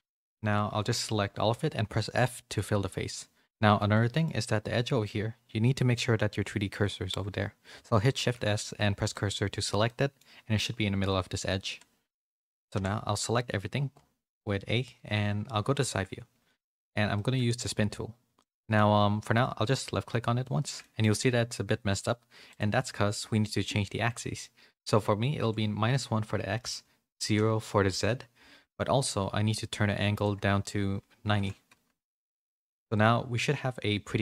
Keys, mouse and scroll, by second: 1.5 f, 2.8 2, 3.4 click, 3.7 middle click, 8.1 shift+s, 9.8 middle click, 12.7 a, 15.4 KP_3, 17.1 middle click, 18.3 middle click, 19.6 click, 20.5 shift+middle click, 20.8 middle click, 22.4-28.7 drag, 26.2 Tab, 30.1-32.3 drag, 32.9-34.0 middle drag.